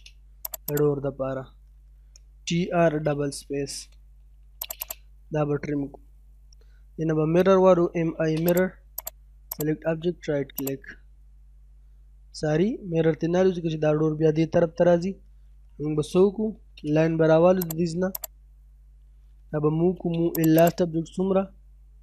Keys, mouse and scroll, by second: 0.5 click, 2.1-4.5 typing, 4.6 click, 5.1-5.5 scroll down 1, 5.5 middle click, 7.4-7.9 typing, 8.1-8.5 scroll up 1, 8.5 click, 9.3 scroll down 1, 9.5 right click, 10.6 click, 16.1 l, 16.3 space, 16.8 scroll up 1, 17.6 click, 19.5 m, 19.7 space, 20.0 l, 20.1 space, 20.4 right click, 20.6 click, 21.9 9.